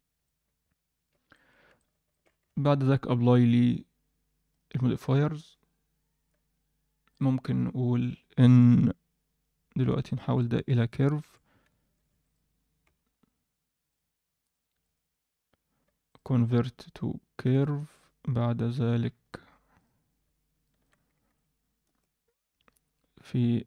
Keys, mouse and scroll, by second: 0.0-0.5 scroll down 2, 0.2-1.0 middle drag, 1.3 middle click, 1.7 alt+shift+middle click, 2.1 ctrl+middle click, 2.5 ctrl+a, 7.1-9.3 drag, 10.0-12.0 right drag, 12.0 shift+d, 12.8 m, 14.4 click, 14.8 click, 16.0-17.8 right drag, 19.0-19.7 scroll down 1, 19.7 drag, 19.7 scroll down 1, 20.6-21.9 shift+drag, 22.2-22.5 scroll down 1, 22.8-23.6 scroll down 3.